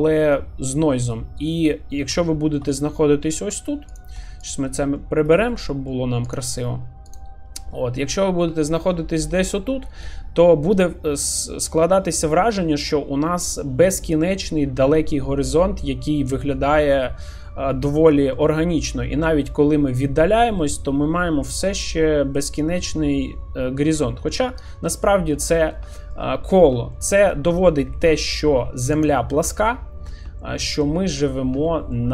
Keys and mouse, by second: 1.1-1.7 middle drag, 2.3 shift+middle click, 3.2 shift+middle click, 5.0-5.4 shift+middle drag, 5.7 middle click, 7.1 click, 7.7 middle click, 8.6 shift+middle click, 8.9-17.3 middle drag, 18.1 shift+middle drag, 19.7-21.7 middle drag, 22.4-23.2 middle drag, 24.3 middle drag, 25.1 shift+middle drag, 26.0 shift+middle click, 27.0-27.3 shift+middle drag, 27.8 shift+middle drag, 29.0 click, 30.4-30.8 shift+middle drag, 31.7 shift+middle click.